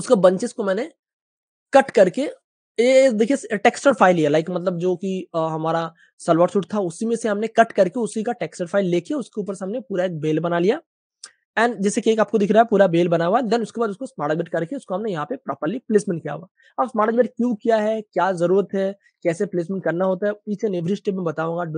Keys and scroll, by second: 2.1 super+space, 2.2 super+space, 4.6 space, 4.6 space, 4.7 space, 8.5 super+space, 9.7 super+w, 11.4 super+space, 13.0 super+space, 13.6 super+w, 14.6 super+space, 16.8 super+space, 18.4 space, 18.5 space, 18.5 space.